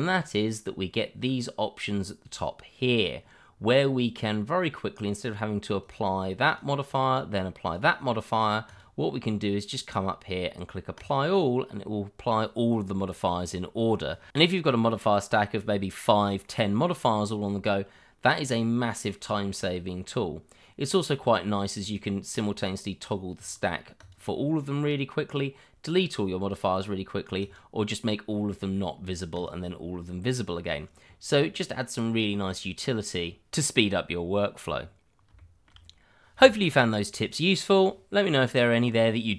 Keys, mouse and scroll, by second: 5.8 click, 10.9 click, 18.4 click, 21.8 click, 27.4 click, 34.7-35.3 scroll down 1, 35.6 shift+middle click.